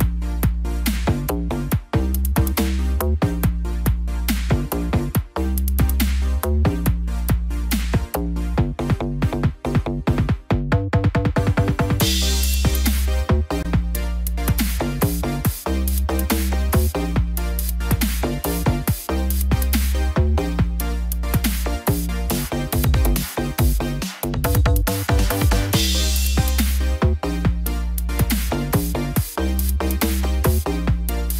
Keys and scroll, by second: 20.8 ctrl+t.